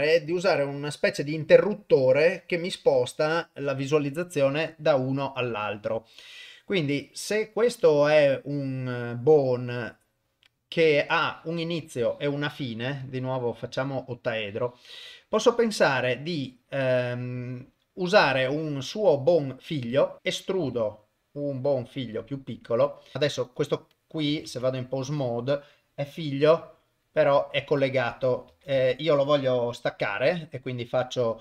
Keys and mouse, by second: 13.0-13.9 drag, 16.7 click, 20.2 shift+middle click, 20.2 KP_1, 20.6 e, 22.9 click, 23.1 ctrl+p, 23.1 ctrl+middle click, 23.5 click, 23.9 click, 24.5 ctrl+Tab, 25.2 click, 26.5 r, 27.8 click, 28.8 Tab, 30.0-31.4 right drag.